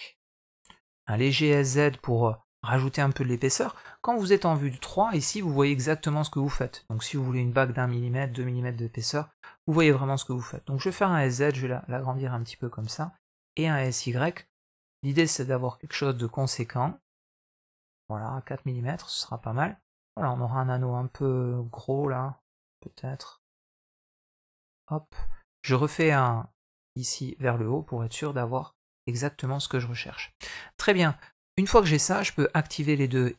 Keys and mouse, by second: 1.3 s, 3.8 KP_3, 5.0 shift+middle click, 10.3 s, 13.2 s, 18.2 middle click, 19.2 Tab, 19.6-20.4 middle drag, 21.0 Tab, 21.3 middle drag, 22.3 s, 23.9 Tab, 24.3-24.9 middle drag, 26.6 click, 27.2 middle click, 27.8-28.6 middle drag, 29.0 middle click, 29.6 shift+middle drag, 29.9 middle drag, 31.4 Tab, 32.5 click, 32.9 click, 33.2 middle click.